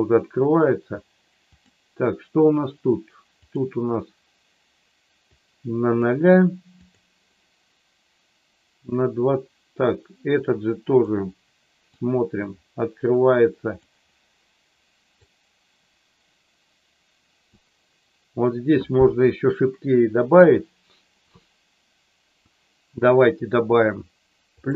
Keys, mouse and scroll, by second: 1.4 click, 3.5 click, 5.4 click, 6.8 click, 10.3 click, 12.0-13.8 drag, 15.3-17.4 drag, 24.6 click.